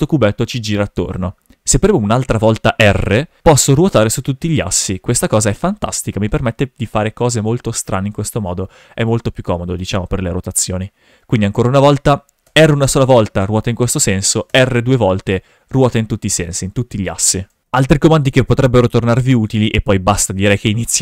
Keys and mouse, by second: 2.8 r, 9.8 right click, 12.4 r, 14.5 r, 17.5 right click, 17.6 shift+f.